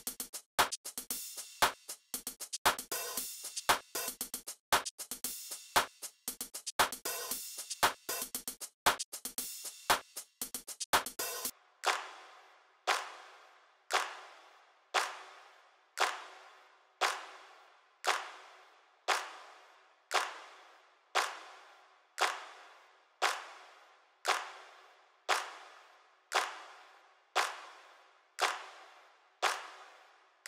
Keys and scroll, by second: 11.4 typing.